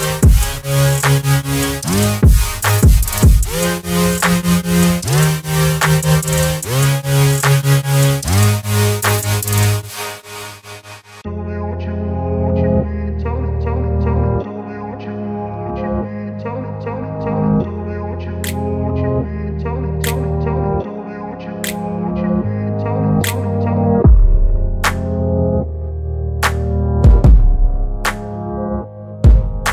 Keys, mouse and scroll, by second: 8.8-10.7 shift+drag, 12.4 ctrl+t, 13.8 click, 16.0 ctrl+t, 17.4-21.1 drag, 24.0 ctrl+t, 25.2-26.4 drag.